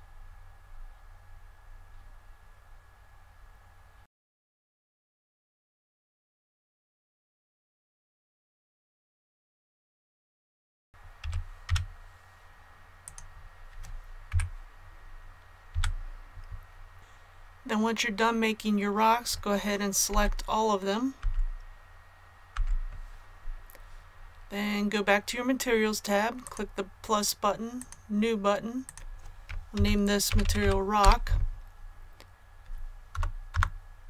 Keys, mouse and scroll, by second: 0.1-2.2 scroll up 1, 2.2 scroll down 1, 2.2-4.0 scroll up 1, 4.0 click, 4.1 middle click, 4.4 right click, 4.5-9.0 typing, 4.7 click, 4.9 middle click, 5.0 right click, 5.3 click, 5.4 middle click, 5.6 click, 6.1 click, 6.7 middle click, 6.8 right click, 7.1 scroll up 1, 7.1 scroll down 1, 7.4 click, 7.6 middle click, 7.7 right click, 7.9 scroll down 1, 7.9 scroll up 1, 8.2 scroll down 1, 8.3 click, 8.4 middle click, 8.5 scroll up 1, 8.7 right click, 9.2 scroll up 1, 9.3 scroll down 1, 9.4 click, 9.5 middle click, 9.6 scroll up 1, 9.7 click, 10.0-11.6 typing, 10.3 click, 10.6 click, 10.6 scroll down 1, 10.7 scroll up 1, 13.0-14.0 drag, 14.2 KP_1, 15.6 a, 16.3 scroll down 1, 16.5 scroll up 1, 16.6 scroll down 1, 16.7 scroll up 1, 16.9-19.7 scroll down 1, 26.4 click, 29.7-30.5 typing, 33.0 BackSpace, 33.4 Return.